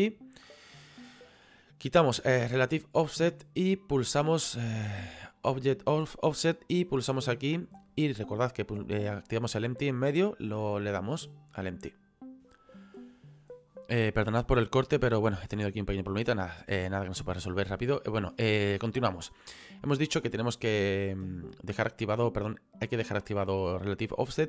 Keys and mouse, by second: 2.6 click, 5.3 click, 6.6 click, 10.6 click, 12.3 click, 21.1 click.